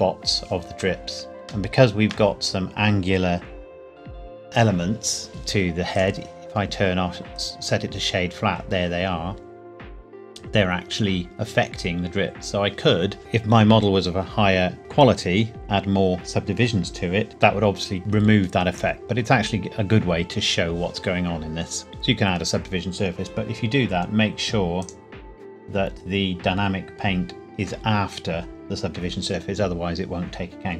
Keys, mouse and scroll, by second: 1.1 shift+Num_Lock, 1.1-1.6 scroll down 1, 1.6 shift+middle click, 5.9 right click, 7.3 click, 8.1-9.9 scroll up 1, 24.8 click.